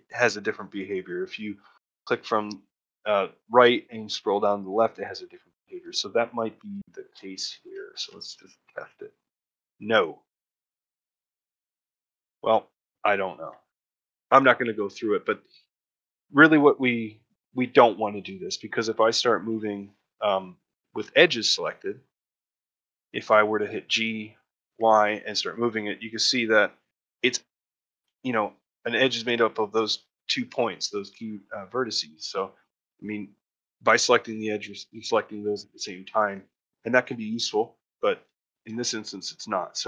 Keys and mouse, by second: 0.8 shift+click, 2.3-4.7 shift+drag, 5.9 ctrl+middle click, 6.3 a, 7.1 shift+middle click, 7.4 alt+middle click, 8.5 shift+click, 13.1 ctrl+middle click, 13.7 shift+middle click, 15.7 shift+middle click, 18.9 shift+middle click, 19.2 middle click, 19.5 shift+middle click, 19.9 shift+middle click, 26.7 middle click, 27.4 ctrl+middle click, 27.9 shift+middle click, 32.3 ctrl+middle click, 35.5 ctrl+middle click, 35.8 shift+middle click, 36.8 middle click, 37.9 shift+middle click, 38.3 ctrl+shift+middle click.